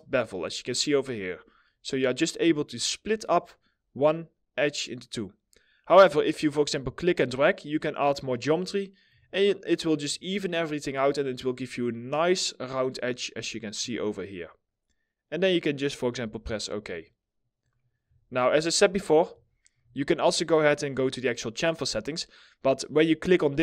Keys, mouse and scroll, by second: 8.9 alt+middle click, 9.8 alt+middle click, 10.2-12.2 scroll up 1, 15.4 middle click, 15.5 scroll down 1, 16.0 alt+middle click, 16.4 alt+middle click, 17.3 double click, 17.7 alt+middle click, 18.3 alt+middle click, 19.0 alt+middle click.